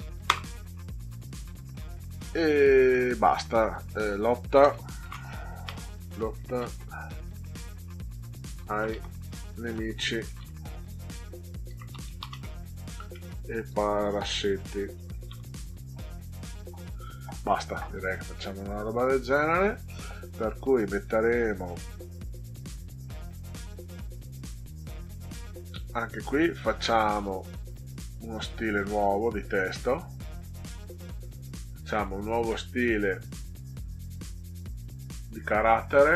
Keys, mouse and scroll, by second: 0.3 Return, 5.4-6.8 typing, 8.3-15.7 typing, 18.7 ctrl+scroll down 2, 21.1 click, 26.7 click, 28.9 click, 30.6 click, 31.9 click, 35.0 click.